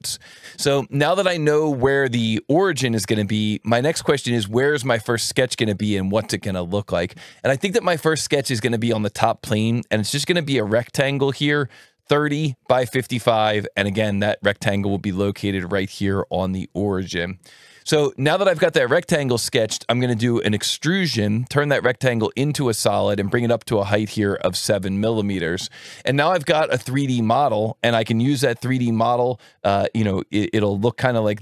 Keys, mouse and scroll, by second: 19.3-20.4 right drag, 20.7 click, 21.5-22.5 drag, 22.5 right click, 23.0 click.